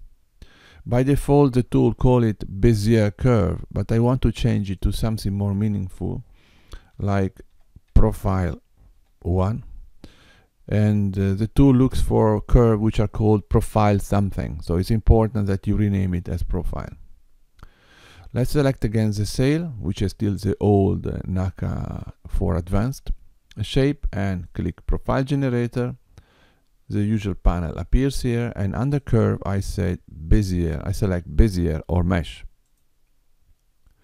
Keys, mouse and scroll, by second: 4.9 click, 5.0 click, 18.8 click, 24.4 click, 28.9 click.